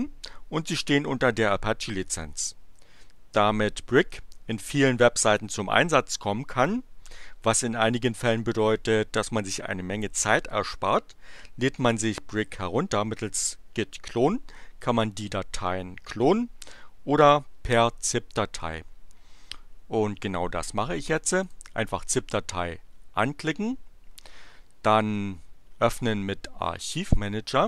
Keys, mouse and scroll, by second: 21.4 click, 26.0 click.